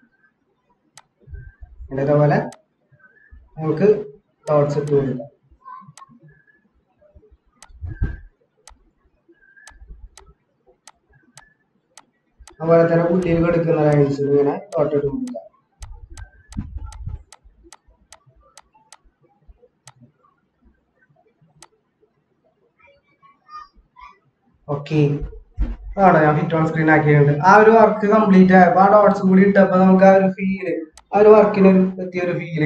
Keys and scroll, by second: 24.0 ctrl+-.